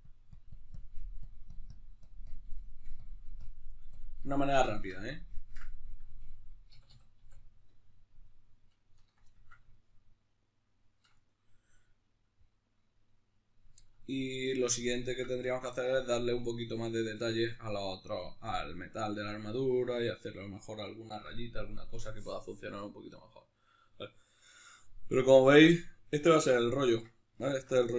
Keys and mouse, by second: 2.3 shift+middle click, 2.8-4.0 drag, 4.0-19.0 ctrl+middle drag, 6.4 a, 26.8 Tab, 27.2 shift+middle click.